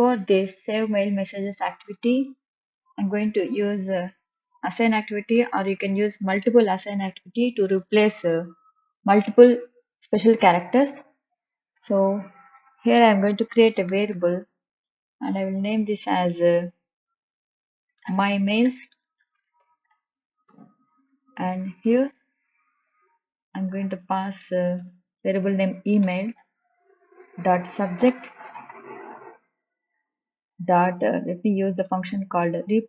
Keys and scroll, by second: 6.2 m, 7.0 l, 7.4 t, 13.4 Return, 16.2 ctrl+k, 21.3 l, 22.1 s, 27.1 i, 28.3 Return, 31.3 Return, 32.1 ..